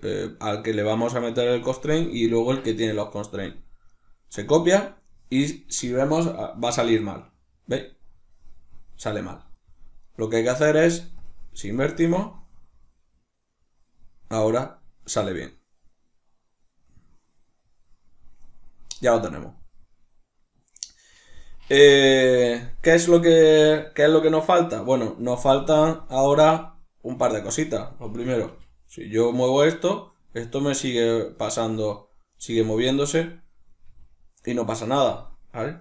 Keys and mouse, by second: 3.5 right click, 5.0 right click, 6.4 r, 9.6 right click, 11.4 right click, 11.6 r, 22.1 right click, 25.2 r, 27.2 right click, 28.1 g, 31.0 right click, 31.4 g, 32.1 right click, 33.5 g, 34.5 right click.